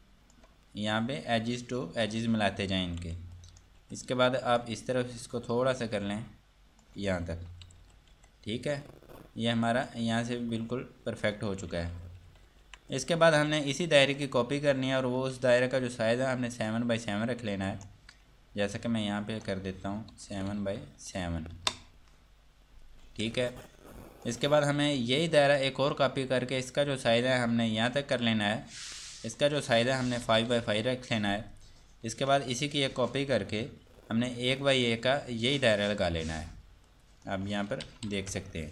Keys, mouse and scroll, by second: 2.0 scroll down 1, 3.2 F2, 3.5 click, 4.0 F2, 4.5 click, 7.6 scroll down 1, 9.9 click, 11.9 F3, 13.1 click, 13.9 Escape, 14.4 click, 16.9 shift+click, 19.3 click, 20.3 KP_7, 20.5 Tab, 20.7 KP_7, 21.8 KP_Enter, 23.3 F2, 23.8 click, 26.3 shift+click, 28.2 shift+right click, 29.3 click, 30.3 KP_5, 30.4 Tab, 30.6 KP_5, 30.8 KP_Enter, 33.3 click, 35.7 shift+right click, 37.1 click, 38.2 Tab, 38.3 KP_1, 38.5 KP_Enter.